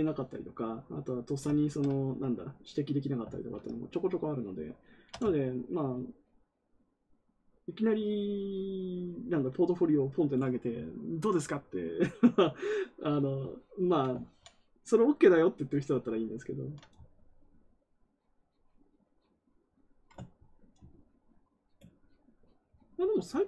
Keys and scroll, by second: 3.2 ctrl+z.